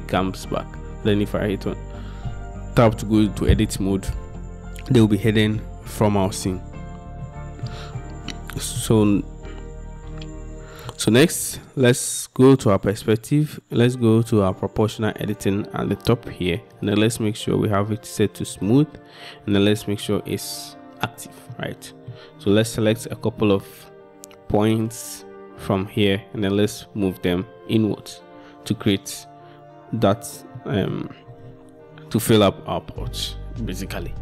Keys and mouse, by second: 2.9 Tab, 7.3 shift+click, 8.0 click, 17.0-19.7 drag, 20.1 click, 21.6 click, 24.8 click, 30.7 middle click.